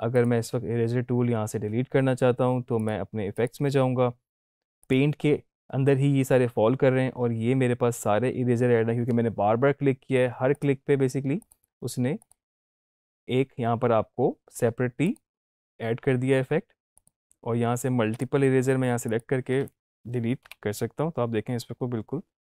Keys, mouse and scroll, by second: 0.2 click, 2.8 click, 10.6 click, 15.1 click, 19.1 shift+click.